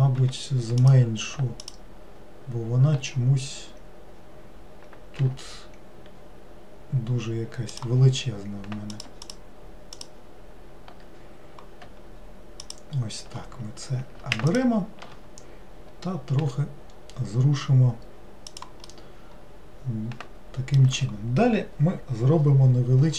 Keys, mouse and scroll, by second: 0.8 click, 1.7 alt+click, 8.9 click, 9.3 alt+click, 10.0 alt+click, 12.7 alt+click, 14.5 alt+shift+click, 16.4 g, 18.9-22.0 middle drag.